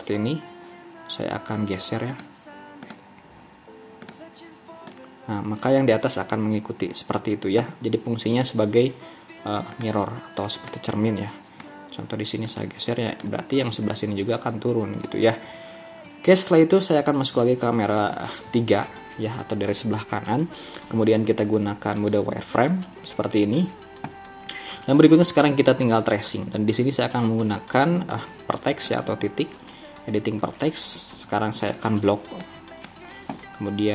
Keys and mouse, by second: 6.5 ctrl+z, 8.9 z, 10.7-11.7 middle drag, 13.7 middle click, 15.1 middle click, 15.7 ctrl+z, 17.1 KP_3, 32.1 b.